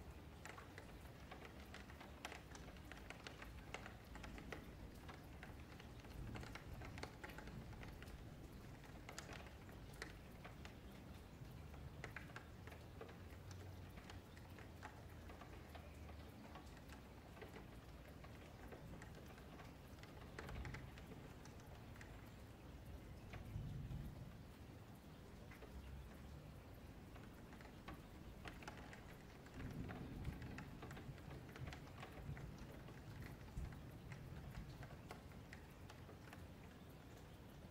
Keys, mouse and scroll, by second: 0.1 3, 0.3 click, 0.7 1, 1.2 F3, 1.6 click, 2.0 F3, 2.7 click, 3.9 click, 4.7 click, 6.0 F3, 6.3 click, 6.8 F3, 7.3 click, 9.5 Tab, 9.9-11.2 middle drag, 11.2 click, 11.5 click, 11.8 middle click, 12.0 Tab, 12.3 3, 12.5 click, 12.8-15.3 middle drag, 15.3 click, 18.5 click, 19.8 ctrl+z, 20.0 ctrl+z, 21.2 middle click, 22.0 ,, 23.4 click, 25.0 ,, 26.1 click, 29.1 Tab, 29.3 click, 29.7 middle click, 30.0 Tab, 30.3 3, 31.1 2, 31.4 click, 31.8 middle drag, 32.0 Tab, 32.9 2, 33.1 click, 33.5 middle click, 33.7 Tab, 33.9 middle click, 34.3-34.7 scroll down 3, 34.7 F3, 35.1 1, 35.5 click, 36.5 middle click, 36.9 scroll up 1, 37.0 F3, 37.3-37.7 scroll down 2.